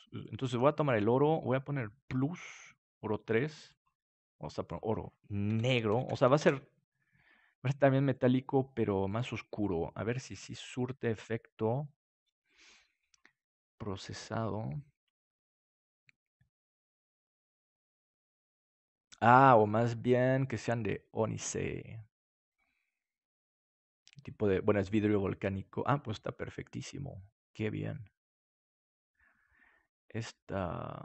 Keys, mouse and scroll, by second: 0.1-5.6 drag, 8.1-15.7 drag.